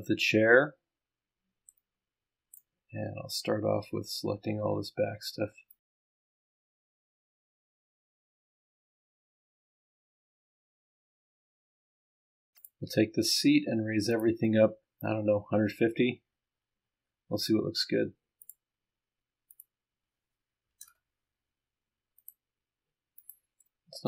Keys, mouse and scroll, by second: 1.7 middle click, 1.8 right click, 2.7-4.0 scroll down 1, 4.0-4.6 scroll up 1, 4.7-5.8 scroll down 1, 5.8 click, 6.2-6.7 scroll up 1, 6.7 ctrl+click, 7.0 ctrl+click, 7.4 ctrl+click, 7.9 ctrl+click, 9.1 ctrl+click, 9.4 ctrl+click, 10.3-12.0 ctrl+scroll up 8, 12.1 scroll down 2, 12.3-12.6 scroll up 2, 12.6 ctrl+click, 14.1 click, 16.0-16.4 scroll down 2, 18.4 click, 19.5 click, 20.8 KP_0, 22.2 click, 23.2 click, 23.7-24.0 right drag.